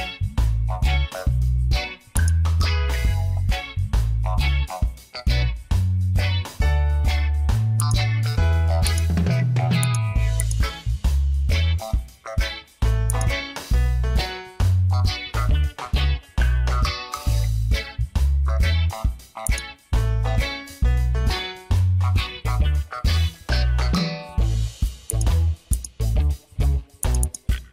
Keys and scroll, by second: 1.1 ctrl+t, 3.4 Return.